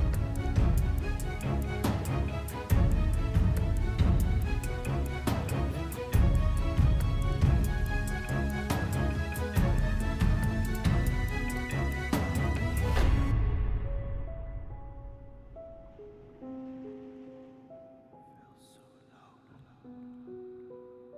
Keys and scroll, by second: 4.0 shift+z, 10.2 alt+a.